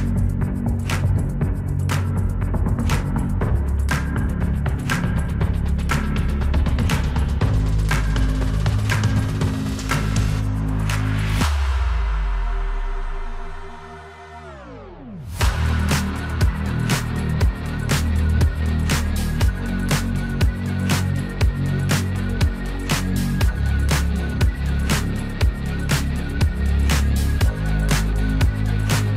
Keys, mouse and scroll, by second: 0.4 ctrl+shift+d, 1.1 click, 3.1 ctrl+shift+d, 3.7-9.9 drag, 10.2 space, 15.9 space, 16.3 click, 24.8-28.8 drag.